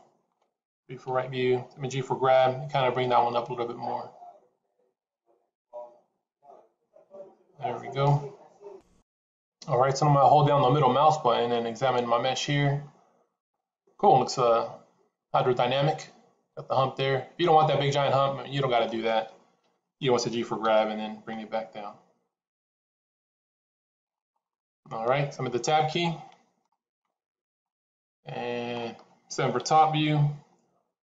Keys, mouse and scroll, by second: 0.9 KP_3, 2.3 g, 11.4 middle click, 19.5 KP_3, 20.5 g, 24.3 middle click, 26.8 Tab, 27.5 middle click, 29.9 KP_7, 30.7-31.1 scroll down 2.